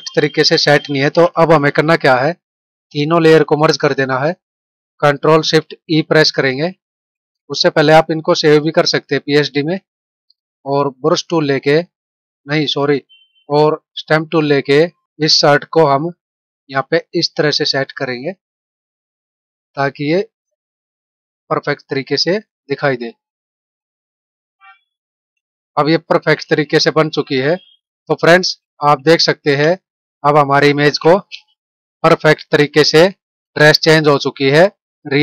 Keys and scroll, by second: 6.2 ctrl+shift+e, 12.2 ctrl+=, 25.5 ctrl+-, 28.3 ctrl+-.